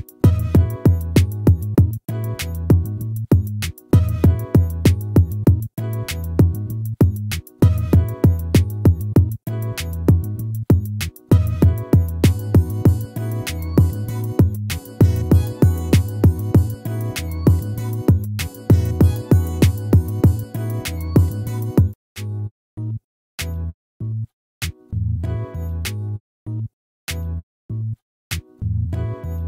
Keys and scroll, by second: 3.5 ctrl+-, 6.3 ctrl+-, 9.3 ctrl++, 12.3 ctrl++, 19.1 ctrl+-, 24.3 ctrl++.